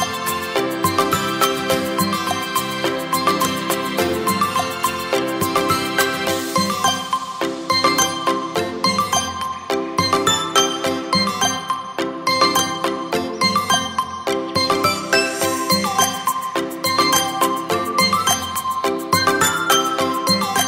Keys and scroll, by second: 9.8 ctrl+v, 14.0 v.